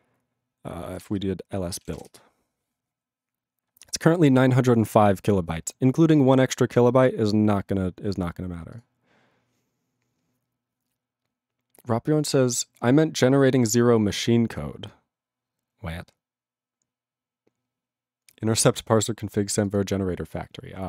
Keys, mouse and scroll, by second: 19.7 click, 19.7 click.